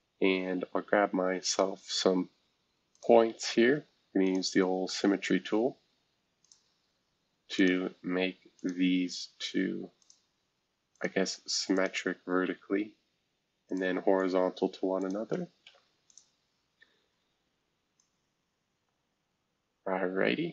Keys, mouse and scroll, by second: 1.5 click, 2.0-2.7 scroll up 1, 2.7 scroll up 1, 2.9 click, 4.2 click, 4.8 Escape, 5.4 s, 6.4 click, 7.5 click, 12.4 Escape, 13.7-15.6 drag, 15.6 h, 16.1-17.6 drag, 18.0-20.5 drag.